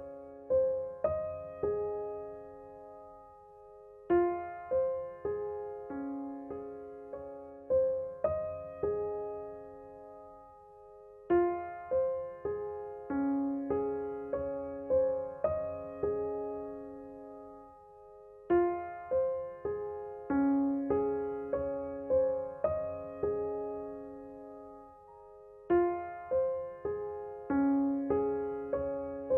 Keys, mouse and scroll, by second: 2.2-19.9 drag, 20.0-29.3 drag.